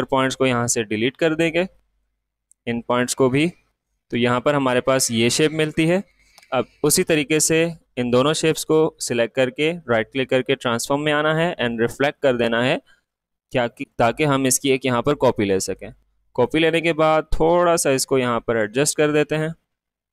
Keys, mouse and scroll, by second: 2.0-5.1 drag, 4.6 typing, 5.1-7.0 drag, 7.0 right click, 9.5 typing, 9.7-20.1 drag.